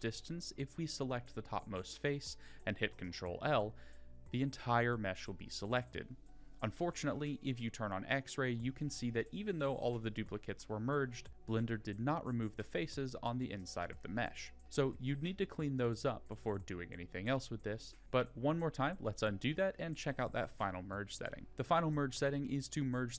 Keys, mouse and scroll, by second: 4.0 click, 5.4 click, 6.4 click, 7.3 click, 9.0 middle click, 10.3 middle click, 11.3-12.7 scroll up 2, 12.7 g, 16.5 Tab, 18.0 ctrl+z, 18.2 ctrl+z, 18.5 ctrl+z, 18.9 ctrl+z, 19.2 ctrl+z, 19.6 ctrl+z, 20.4 ctrl+z.